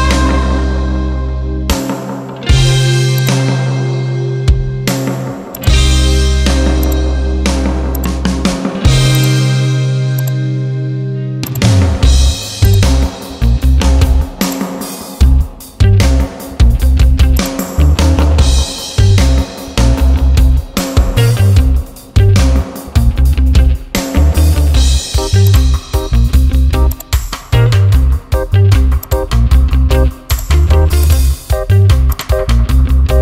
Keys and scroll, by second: 2.2 ctrl+j, 15.1 ctrl+t, 22.1 Return.